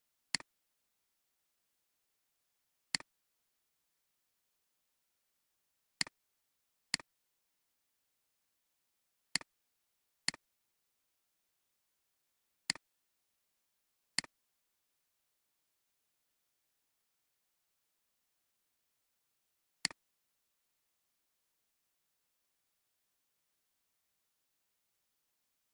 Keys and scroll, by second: 17.8-18.9 typing.